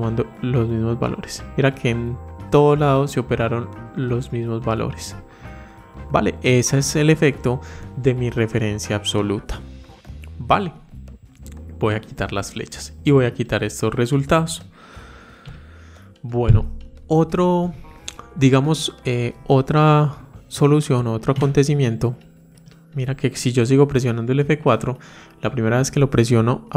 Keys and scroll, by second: 24.3 F4.